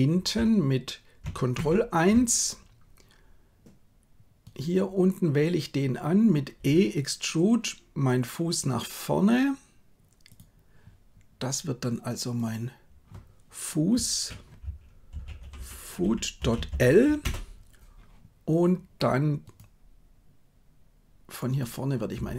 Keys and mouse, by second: 1.5 ctrl+KP_1, 6.7 e, 12.4-17.3 drag, 15.5 o, 22.2 e.